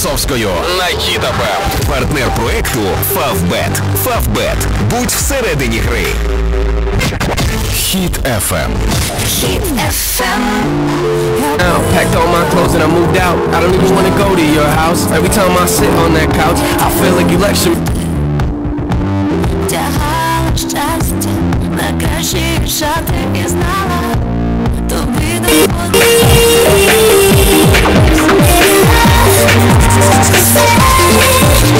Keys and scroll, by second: 1.5 d, 2.0 Down, 2.2 Down, 3.2 Return, 17.8 Page_Down.